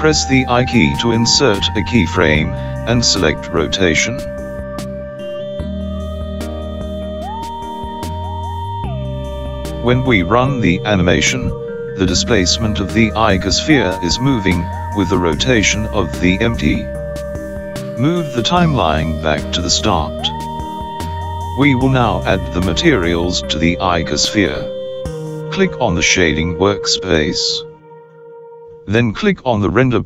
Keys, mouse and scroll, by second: 4.7 i, 9.7 space, 14.7 space, 16.8 click.